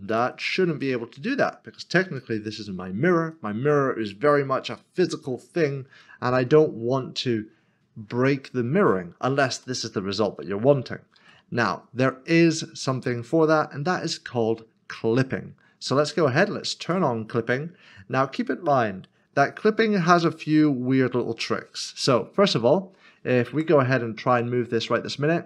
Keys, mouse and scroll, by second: 0.1 click, 0.8 middle click, 4.7 scroll down 1, 5.5-5.9 scroll up 1, 6.0 shift+middle click, 6.2 shift+scroll down 1, 6.5-8.5 scroll up 1, 9.6 middle click, 11.1 ctrl+z, 16.8 click, 23.5 click.